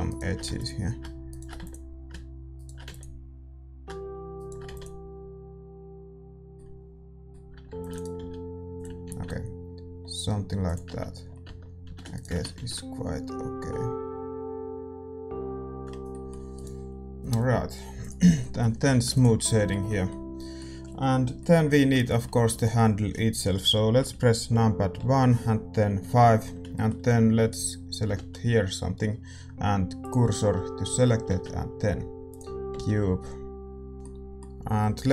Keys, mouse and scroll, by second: 0.0-6.5 right drag, 0.6 x, 1.6 x, 2.9 x, 4.8 x, 6.5-8.7 middle drag, 7.6 ctrl+r, 8.1 s, 9.0 ctrl+b, 10.8 Tab, 10.8-13.7 middle drag, 11.4 Tab, 11.8 a, 12.1-15.1 right drag, 12.5 ctrl+b, 15.8 Tab, 15.8-21.9 drag, 16.0-24.9 middle drag, 16.5-18.3 right drag, 18.8 a, 21.9 Tab, 22.4 a, 23.9 KP_1, 24.9 KP_5, 26.3-30.0 middle drag, 27.4-30.0 right drag, 30.0 shift+s, 30.8 a, 32.3 shift+a, 32.7 s, 33.9-35.1 middle drag.